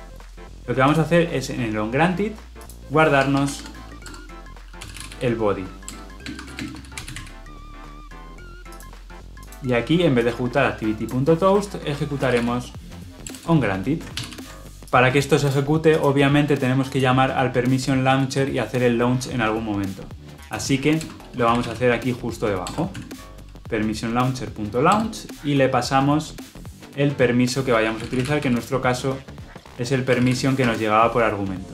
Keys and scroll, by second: 3.1 Tab, 5.8 Return, 13.2 Return, 14.1 ctrl+alt+l, 14.2 ctrl+alt+o, 22.5 Return, 30.6 Escape.